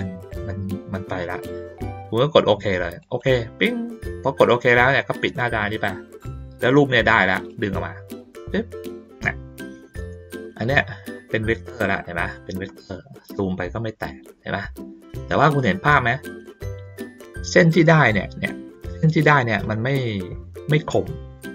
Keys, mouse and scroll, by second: 3.0 click, 5.4 click, 7.5-9.9 drag, 10.3 ctrl+middle click, 10.7 ctrl+middle click, 11.0 ctrl+middle click, 11.4 ctrl+middle click, 11.8 ctrl+middle click, 12.0-12.3 ctrl+scroll down 1, 12.9-13.9 ctrl+scroll down 6, 14.3 ctrl+scroll down 2, 15.8 ctrl+middle click, 18.9 ctrl+middle click, 20.3 ctrl+middle click, 21.0 middle click.